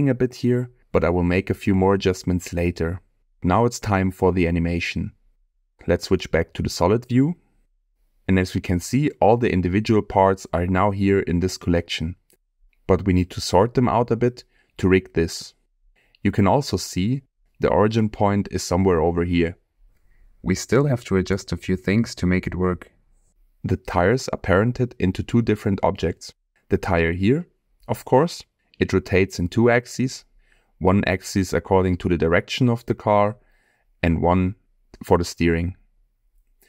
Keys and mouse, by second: 0.6-1.6 middle drag, 1.9-2.3 middle drag, 2.6-3.4 middle drag, 3.6-4.0 shift+middle drag, 7.0 click, 8.5-9.0 shift+middle drag, 10.4 click, 11.7-13.9 drag, 23.0-23.5 middle drag, 24.6 shift+middle drag.